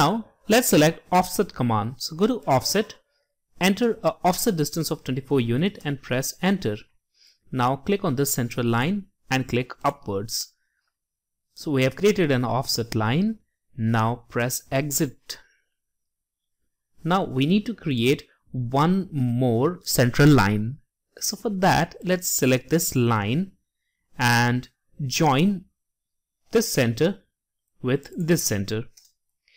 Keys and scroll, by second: 3.5-4.2 typing.